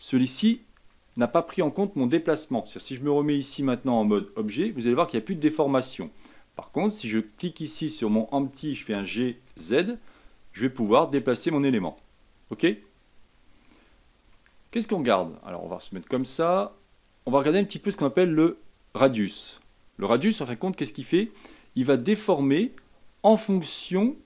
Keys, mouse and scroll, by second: 3.5-4.6 scroll up 3, 4.6 Tab, 5.4 middle click, 6.0-7.1 scroll down 3, 7.1 click, 8.9 g, 13.2-13.5 scroll up 4, 14.5-15.4 shift+middle drag, 15.4 click, 20.5-24.2 drag.